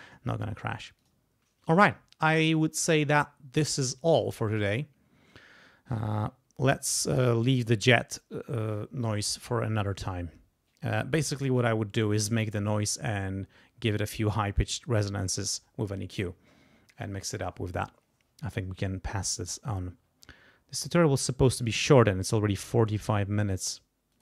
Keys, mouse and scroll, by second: 1.0 click, 9.3-11.3 drag, 24.1 click.